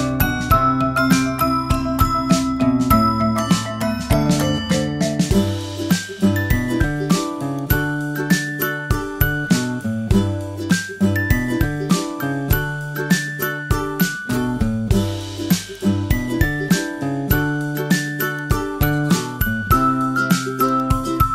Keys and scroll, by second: 11.4 super+j, 13.2 super+t.